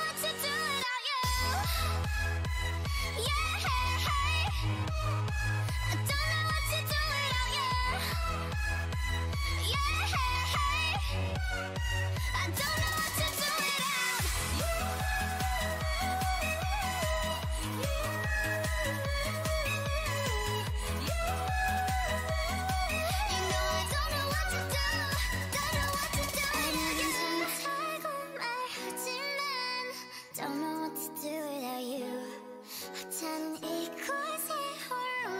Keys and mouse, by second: 0.6 a, 2.4 alt+m, 3.2 ctrl+z, 3.7 alt+m, 5.2 alt+m, 5.9 a, 6.3-8.5 drag, 7.7 m, 8.4 alt+m, 10.2 alt+m, 11.3 a, 12.3 g, 14.7 a, 20.3 k, 21.2 right click, 21.4 ctrl+r, 21.8 a, 22.1 k, 23.9 shift+e, 24.5 a, 28.1 ctrl+Tab, 29.7 c, 33.5-34.8 drag, 33.7 c, 35.2 c.